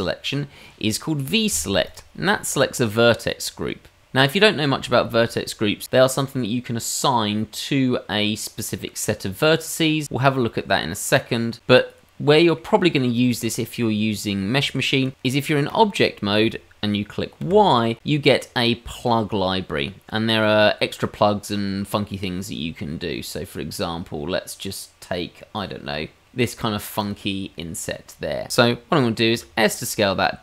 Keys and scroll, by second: 17.4 y, 29.3 s.